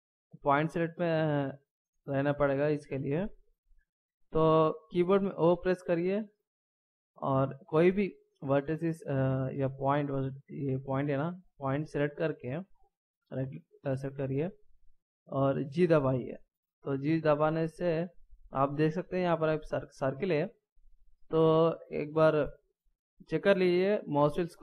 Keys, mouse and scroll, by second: 5.4 o, 10.7 right click, 12.7 middle click, 15.7 g.